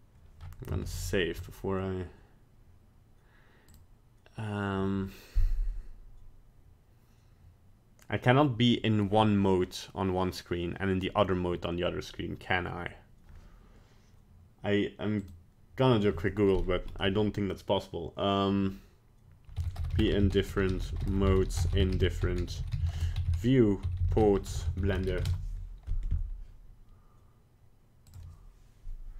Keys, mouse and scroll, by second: 1.4 ctrl+s, 3.7 click.